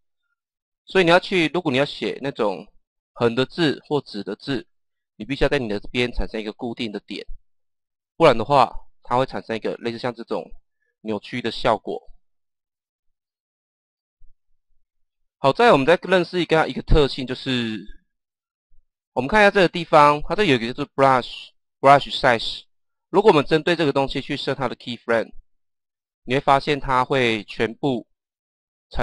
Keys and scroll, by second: 8.9 Page_Down.